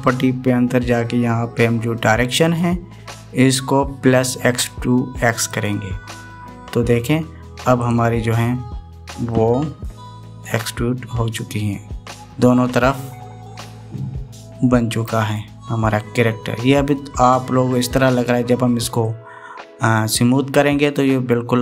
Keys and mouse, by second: 3.3-6.7 drag, 10.1-14.4 middle drag, 14.7-16.2 middle drag, 16.7-17.7 middle drag, 19.8 middle click, 20.3-21.6 middle drag.